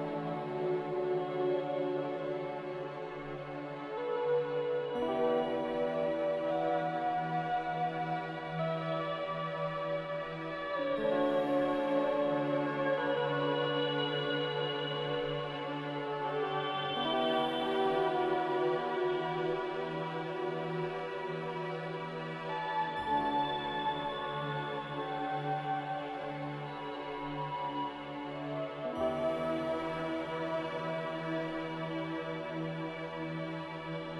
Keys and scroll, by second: 9.5 scroll, 15.5 a, 23.4 ctrl+s.